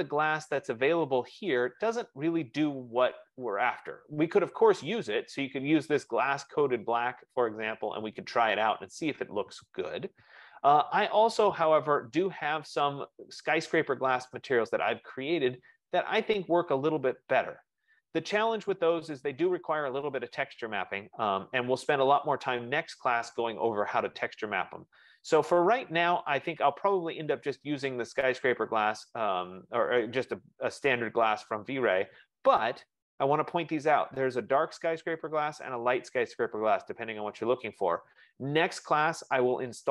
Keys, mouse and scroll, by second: 0.4 click, 2.2-3.4 scroll down 22, 3.4 scroll up 7, 3.5 scroll down 1, 3.8 scroll down 1, 4.4-5.8 scroll, 5.9 click, 8.6 scroll down 1, 10.4 click, 15.4 F15, 25.3-30.4 drag, 31.4-36.9 middle drag, 31.4-32.8 scroll down 11, 32.8-33.8 scroll down 1, 33.8-35.7 scroll down 1, 35.7-36.8 scroll down 1, 36.8 scroll down 1.